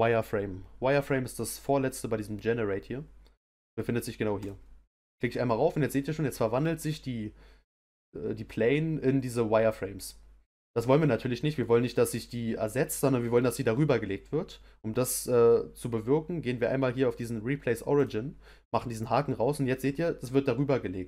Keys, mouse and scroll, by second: 18.1 click.